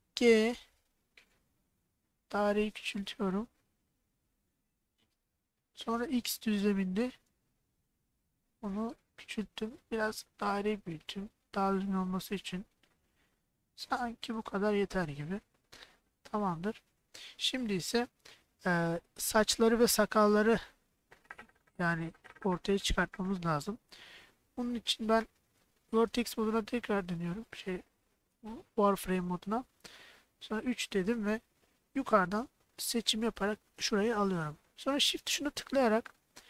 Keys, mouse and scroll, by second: 0.3 g, 6.4 x, 14.6 click, 15.9-17.0 middle drag, 18.2 middle click, 26.4 alt+z, 29.8 KP_1, 30.5 KP_3, 32.1-34.1 drag.